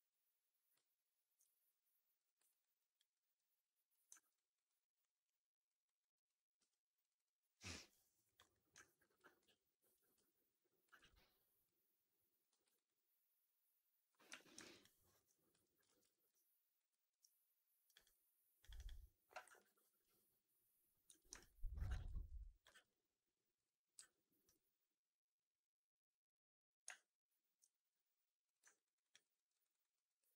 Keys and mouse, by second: 2.3 alt+right drag, 2.6 alt+drag, 3.0 alt+middle drag, 4.0 alt+middle drag, 4.2 alt+right drag, 4.6-5.6 alt+drag, 5.7 alt+right drag, 6.0 alt+click, 6.5 2, 6.9 click, 7.1 click, 8.2 click, 8.3 click, 8.7 alt+click, 9.3 ctrl+f, 10.1 3, 10.8 ctrl+e, 11.9 click, 12.4 w, 12.6 alt+right click, 12.8-14.0 alt+drag, 14.2 4, 14.5 alt+right click, 14.7 alt+click, 15.4 2, 15.7 shift+x, 16.0 alt+middle click, 16.2 alt+right click, 16.8 alt+middle click, 16.9 alt+click, 17.8 click, 17.9 click, 18.5 click, 18.6 click, 19.5 ctrl+f, 21.0 4, 21.2 alt+right drag, 21.5 alt+right drag, 21.8 shift+x, 22.0 alt+middle drag, 22.3 alt+drag, 22.6 q, 23.8 q, 28.6 alt+right drag, 28.8 alt+right drag, 29.0 alt+drag, 29.2 alt+middle drag, 29.4 alt+right drag, 29.6 alt+right drag, 29.8 alt+drag, 30.1 alt+middle drag, 30.3 alt+right drag.